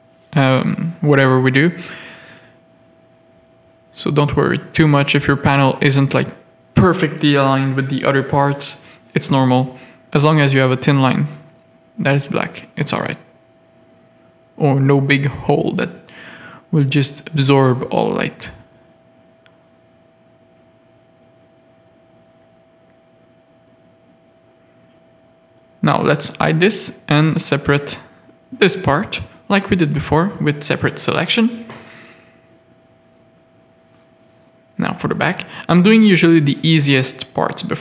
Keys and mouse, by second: 1.7 z, 2.1 shift+middle click, 2.9 Tab, 4.0 Tab, 4.4 Tab, 4.7 ctrl+r, 6.0 Tab, 6.5 alt+a, 6.9 z, 7.5 z, 11.0 middle click, 11.8 middle click, 12.8-18.1 middle drag, 18.4 middle click, 19.2 click, 19.7 z, 20.3 alt+a, 20.9 shift+middle click, 21.1 middle click, 21.6 Tab, 21.7 middle click, 22.2 3, 25.4 h, 26.2 l, 27.3 alt+h, 30.2 Tab, 30.4 alt+a, 30.8 middle click, 31.5 z, 32.2 middle click, 33.1 Tab, 33.9 middle click, 34.8 z, 34.8 middle click, 36.1 middle click, 37.3 middle click.